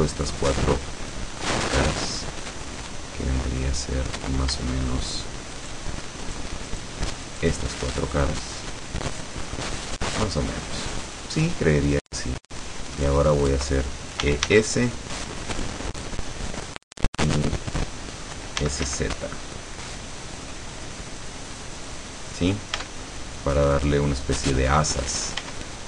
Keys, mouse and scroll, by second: 1.4-2.4 shift+middle drag, 2.6-4.4 middle drag, 5.6 shift+right click, 6.4 shift+right click, 6.8 shift+right click, 7.3 shift+right click, 7.8-9.8 shift+middle drag, 10.0-11.4 middle drag, 11.8-13.2 middle drag, 14.3 e, 14.6 s, 16.6 click, 18.6 s, 18.9 z, 21.9 click, 22.5 scroll down 1, 22.9 Tab, 23.2-25.5 middle drag, 25.5 Tab.